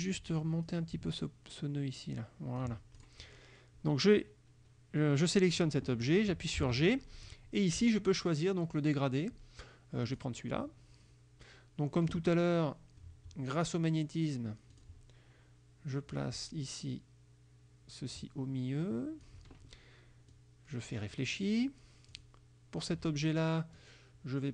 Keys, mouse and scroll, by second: 0.7-2.9 ctrl+drag, 3.0 ctrl+click, 6.7 g, 7.8 click, 10.2 click, 14.8 click, 16.2-19.5 drag, 20.4 click, 22.2 click, 23.8-24.5 drag.